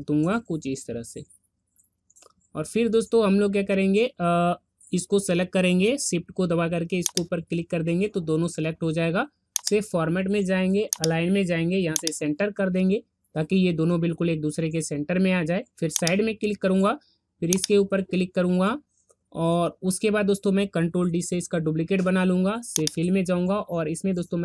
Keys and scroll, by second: 21.2 ctrl+d.